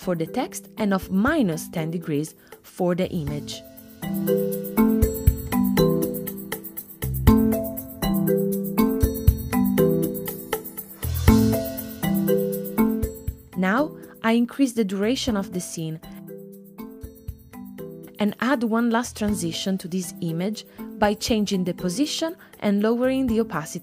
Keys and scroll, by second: 1.5-2.7 typing.